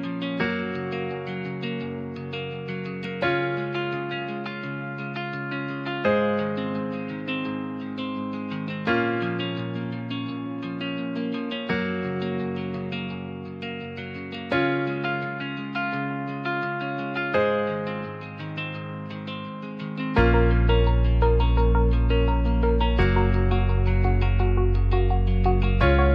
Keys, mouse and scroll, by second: 1.5 click, 2.0 ctrl+r, 2.9 Tab, 3.3 alt+middle click, 3.8 Tab, 4.2 alt+z, 4.5 shift+middle click, 5.0 ctrl+r, 7.3 Tab, 7.3 middle drag, 7.7 alt+z, 7.9 middle click, 8.8 middle click, 9.0 Tab, 9.6 ctrl+r, 10.8 right click, 11.3 Tab, 11.7-12.2 middle drag, 13.0 g, 13.1 z, 15.9 Tab, 16.2 alt+z, 16.6 click, 17.2 g, 17.3 z, 18.8 click, 19.6 click, 20.5 g, 20.6 z, 21.4 click, 22.7 shift+click, 23.3 s, 23.6 z, 25.0 s.